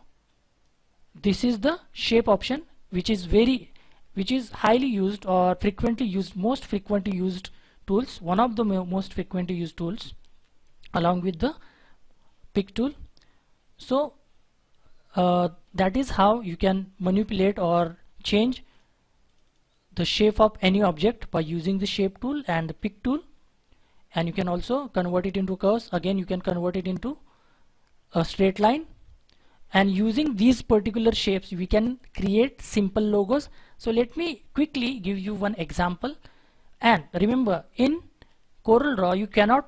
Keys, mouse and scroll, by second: 14.0 scroll down 1, 14.3-15.2 scroll up 1, 19.4 double click, 23.3 scroll down 1, 23.6-24.2 scroll up 1, 28.9-29.3 scroll down 1, 29.3-31.2 scroll up 1, 31.9 double click, 33.2 Delete.